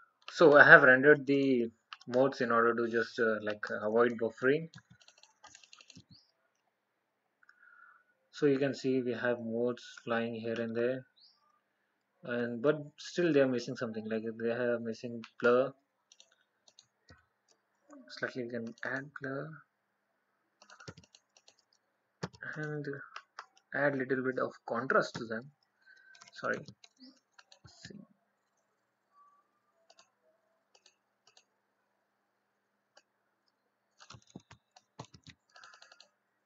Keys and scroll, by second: 34.4 ctrl+x, 35.3 ctrl+v.